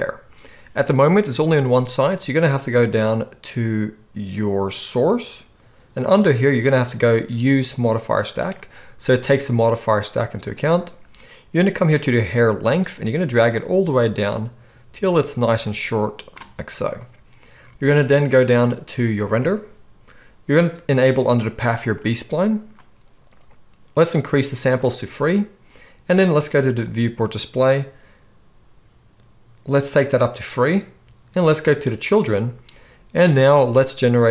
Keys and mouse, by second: 5.0-22.1 drag, 22.1-24.7 middle drag, 24.7-34.3 drag.